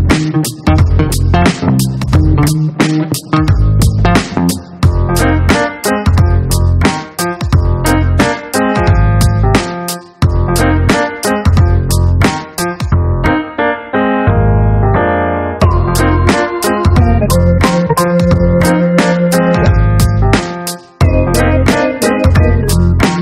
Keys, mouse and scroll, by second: 0.3 click, 1.3-3.0 scroll down 8, 3.6 scroll down 2, 7.0 click, 8.9 click, 12.5 click, 14.4 click, 19.0 click, 21.1 click, 22.4 click.